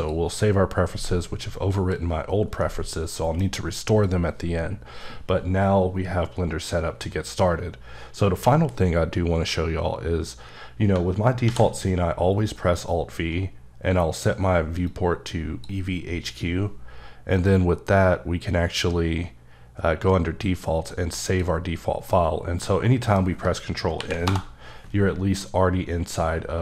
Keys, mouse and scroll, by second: 1.7 click, 2.6 middle click, 10.9 middle click, 11.4 alt+v, 15.2 click, 17.3 click, 20.6 click, 21.3 click, 22.0 middle click, 24.0 ctrl+n, 24.2 Return, 25.5-26.6 scroll up 4.